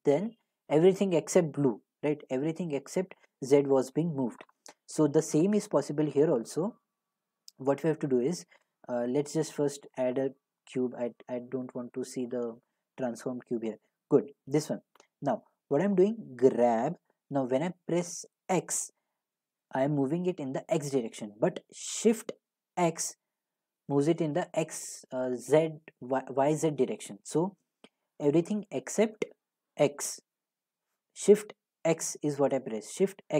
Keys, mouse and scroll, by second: 9.1 click, 10.5 Delete, 11.6 a, 13.1 click, 16.4 g, 18.5 x, 22.8 x, 31.8 x, 32.9 x.